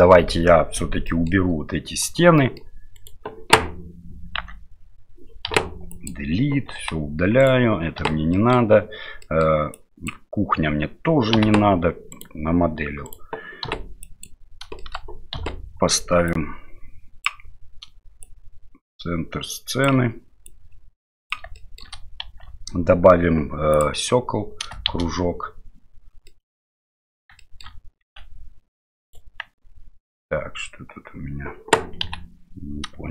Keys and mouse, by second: 1.0 middle click, 2.4 middle click, 2.9 right click, 4.4 Tab, 5.5 Delete, 6.0 click, 6.8 Delete, 7.4-8.0 right drag, 8.0 Delete, 8.4 middle click, 9.3 middle drag, 9.7-10.1 drag, 11.3 Delete, 12.1-13.6 right drag, 13.6 Delete, 14.0 drag, 14.8 shift+middle click, 15.3 KP_7, 16.3 click, 18.2-19.8 drag, 20.5 click, 21.6 shift+middle click, 22.2 shift+a, 24.9 shift+z, 26.4-26.7 middle drag, 27.4 shift+middle drag, 28.0 s, 32.0 Delete.